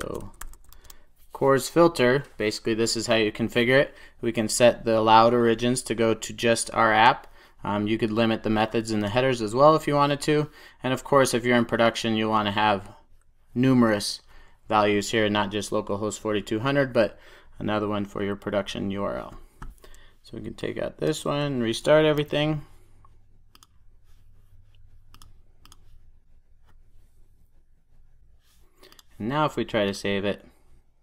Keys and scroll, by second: 0.6 super+s, 22.0 super+s, 23.5 ctrl+r.